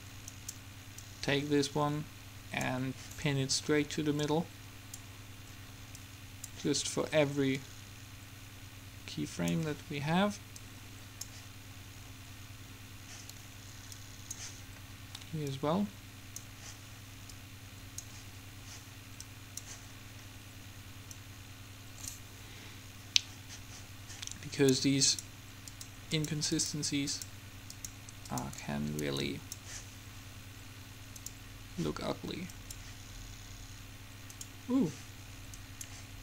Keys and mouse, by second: 4.4-9.5 drag, 10.8-12.5 drag, 12.7-14.1 middle drag, 14.1-17.4 drag, 17.5-19.2 drag, 19.3-21.3 drag, 21.3 middle click, 21.4-23.2 drag, 25.3-31.1 drag, 32.8-36.2 drag.